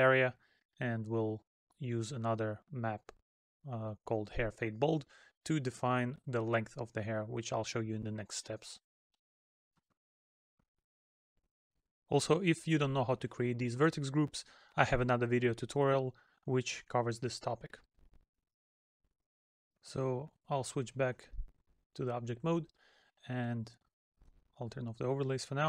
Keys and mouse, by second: 0.1 middle click, 2.6 middle click, 5.7 middle click, 23.4 middle click, 25.1 middle click.